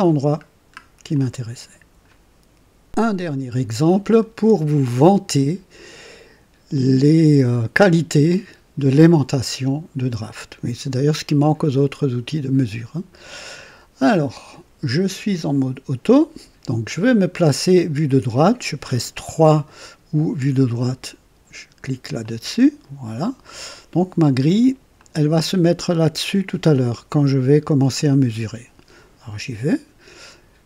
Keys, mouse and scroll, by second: 0.4 scroll down 2, 1.1 click, 2.8 click, 22.1 click, 24.9 click.